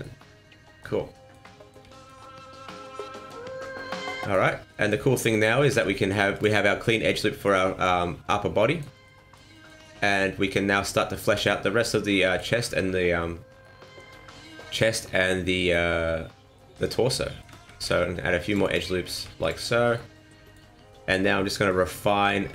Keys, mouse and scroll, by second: 0.0 middle click, 1.1 middle click, 1.4 middle click, 1.9 shift+middle click, 2.2 shift+middle click, 2.8 middle click, 4.7 middle click, 5.7 ctrl+r, 6.8 middle click, 7.6 scroll down 2, 7.8 middle click, 9.0 middle click, 9.5 shift+middle click, 9.8 middle click, 10.8-11.1 scroll down 2, 11.1 middle click, 12.1 middle click, 13.6 middle click, 15.0 middle click, 15.9-16.2 scroll up 2, 16.5 middle click, 17.0 scroll down 1, 17.2 middle click, 17.5 ctrl+r, 19.1 ctrl+r, 19.9 middle click, 21.6 middle click.